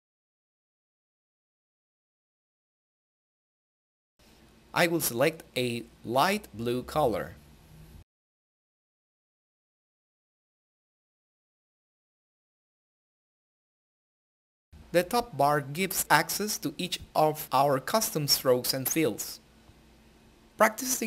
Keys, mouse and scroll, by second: 8.5-10.7 drag, 16.0 click.